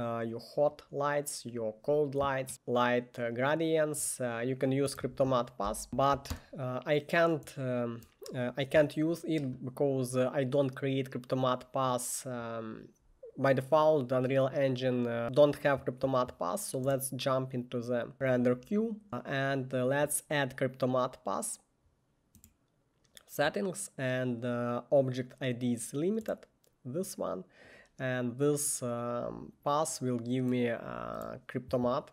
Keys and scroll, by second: 5.1 Tab, 5.5-6.3 typing, 6.4 Return.